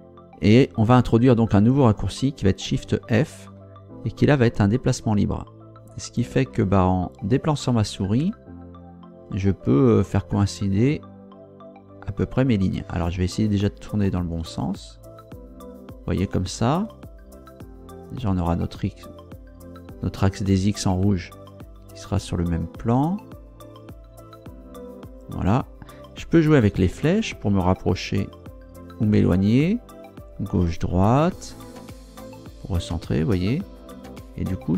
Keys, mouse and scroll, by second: 2.6 shift+f, 26.0 Up, 26.8 Down, 29.2 Left.